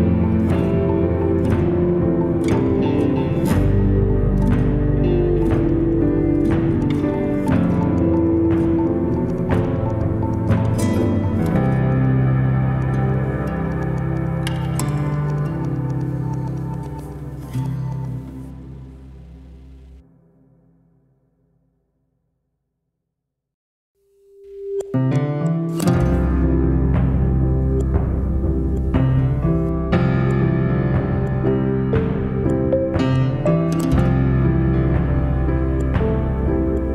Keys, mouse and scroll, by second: 0.0 n, 0.7-1.7 shift+middle drag, 1.7-2.9 scroll up 2, 2.9-3.6 scroll down 1, 3.6-4.6 shift+middle drag, 4.6-5.3 scroll up 1, 5.3-7.5 shift+middle drag, 7.5-9.0 scroll up 2, 9.0-10.1 scroll down 1, 10.1-10.8 scroll up 1, 10.8-13.9 shift+middle drag, 19.7 drag, 26.6 shift+click, 27.2 shift+click, 29.6 r.